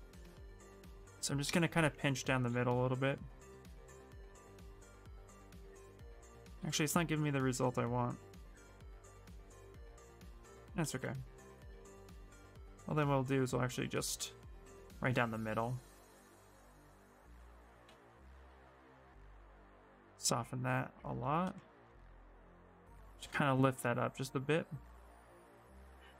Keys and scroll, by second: 6.1 ctrl+z, 6.4 ctrl+z, 8.2 space, 16.1 ctrl+z, 16.3 ctrl+z, 17.6 ctrl+z, 17.9 ctrl+z, 18.2 ctrl+z, 18.4 ctrl+z, 21.9 w, 22.4 w, 22.9 w.